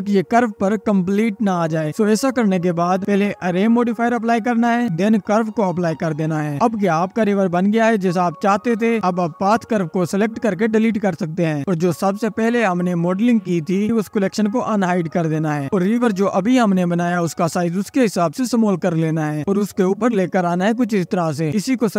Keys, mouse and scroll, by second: 2.5 scroll up 4, 3.3 scroll up 2, 4.2-9.7 drag, 9.7-10.1 scroll up 1, 10.5 click, 12.0 Delete, 12.8-13.8 drag, 14.4 click, 15.0 click, 16.2 click, 16.9-17.2 scroll up 5, 17.6-18.9 scroll down 2, 18.9 click, 20.3-21.1 drag, 21.1 s.